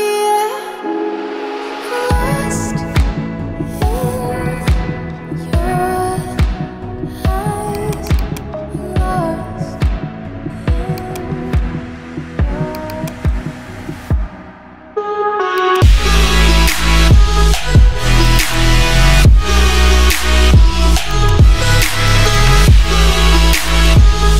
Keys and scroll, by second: 8.7-9.6 typing, 11.9 ctrl+g, 13.5-14.6 typing, 18.8-19.7 typing.